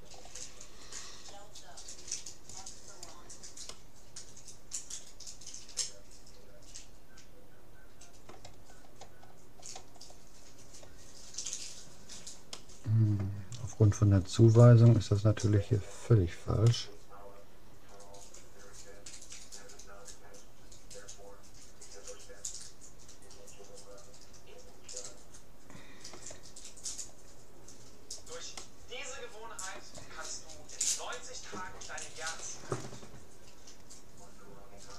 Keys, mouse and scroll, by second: 0.1-1.3 middle drag, 2.5-4.3 drag, 3.7 right click, 4.3-5.3 middle drag, 8.7-11.1 middle drag, 11.1-11.7 scroll up 1, 11.7-13.9 middle drag, 14.3-15.3 scroll up 1, 15.3-16.3 scroll down 1, 16.3 middle click, 17.1-18.3 middle drag, 27.9-30.3 middle drag.